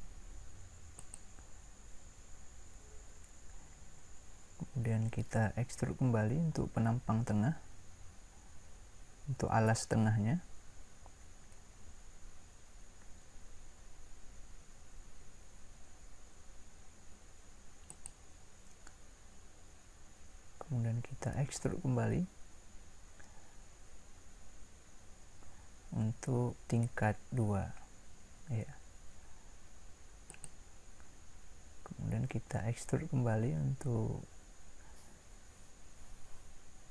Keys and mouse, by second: 12.9 e, 21.4 e.